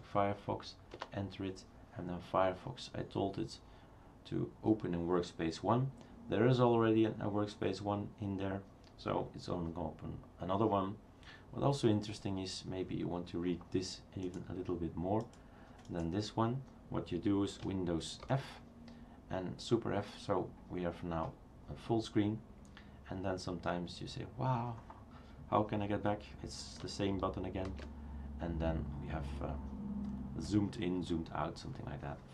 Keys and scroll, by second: 1.0 Return, 18.2 super+f, 27.8 super+f.